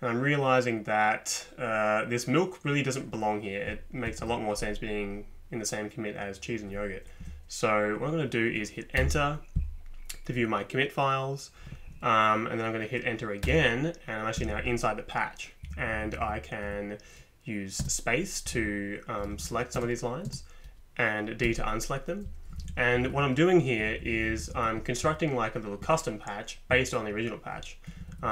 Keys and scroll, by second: 4.2 Up, 7.2 Down, 9.0 Return, 13.4 Return, 14.4 Down, 14.5 Down, 15.6 Down, 15.9 Down, 16.1 Down, 17.8 space, 18.5 Up, 18.6 Up, 19.2 Up, 19.3 Up, 19.5 Up, 19.7 space, 20.3 space, 21.4 d, 22.6 Up, 22.7 Up, 23.0 Up, 23.1 Up, 23.8 Down, 23.9 Down, 24.0 Down, 24.2 Down, 24.3 Down, 24.4 Down, 27.9 Up, 28.0 Up, 28.1 Up, 28.2 Up.